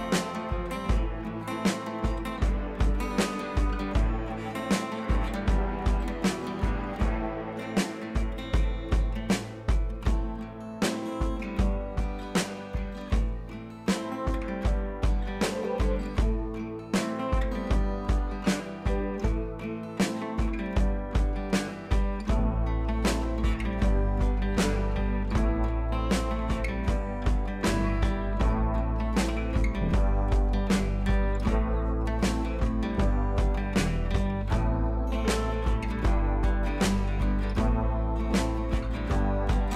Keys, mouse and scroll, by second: 3.4 ctrl+k, 3.5 click, 3.9 ctrl+j, 4.6 click, 7.5-9.8 drag, 28.6-30.9 drag.